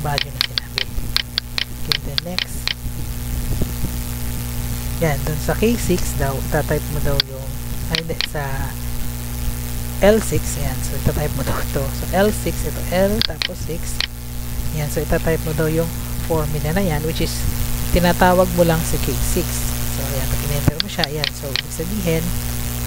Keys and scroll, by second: 10.8 ctrl+c, 11.6 Tab, 14.8 F2, 16.2 ctrl+v, 16.4 BackSpace, 20.2 Return.